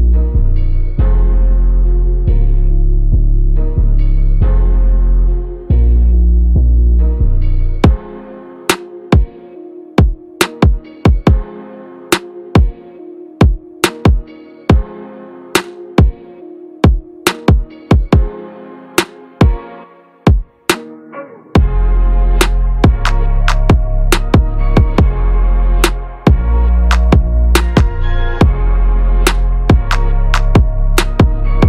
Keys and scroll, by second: 9.3 ctrl+=, 20.1 ctrl+-, 22.8 ctrl+=, 24.2 ctrl+=, 24.7 ctrl+=, 25.9 space.